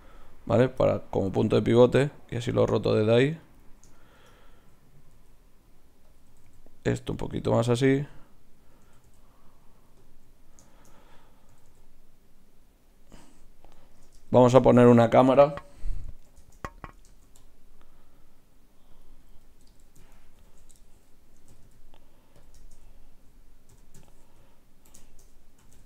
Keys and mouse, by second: 0.0 click, 0.8-3.5 middle drag, 1.4 r, 4.0 right click, 4.5-5.7 drag, 4.5 r, 6.3 r, 7.7-11.2 middle drag, 8.9 r, 11.2-12.8 drag, 11.5 r, 12.8 middle click, 14.2 Tab, 17.2 shift+a, 19.0-20.4 drag, 19.6 right click, 20.4 ctrl+alt+KP_0, 21.4 g, 23.6-25.6 drag, 23.7 t, 24.0 n, 25.6 g.